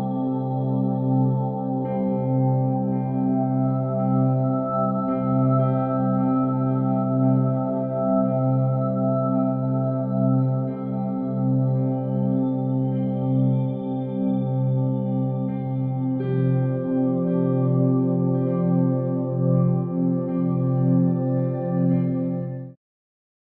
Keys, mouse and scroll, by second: 0.2 click, 0.7 g, 0.7 y, 2.9 click, 3.5 g, 3.8 y, 7.7 click, 8.7 click, 10.3 shift+middle drag, 11.8 F6, 12.3 shift+middle click.